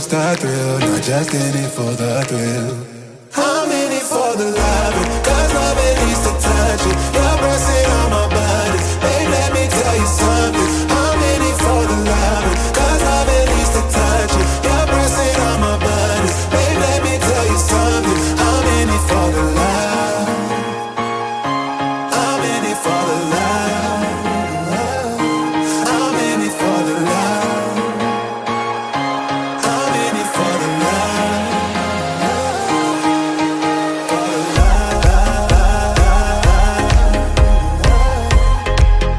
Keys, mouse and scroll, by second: 0.0 middle click, 0.0 scroll down 2, 0.2 middle click, 0.2 scroll up 2, 1.8 m, 2.7 Down, 3.4 Up, 4.8 o, 4.9 k, 5.5 BackSpace, 8.3 Return, 8.6 z, 9.6-12.7 drag, 24.6 alt+a, 25.0 ctrl+s, 25.5-26.9 scroll up 1, 26.9 click, 27.7 alt+a, 28.0 scroll up 1, 28.3 ctrl+s, 28.9 a, 30.2 s, 31.0 right click, 31.4 s, 33.4 KP_Enter, 34.1 g, 38.5 shift+click.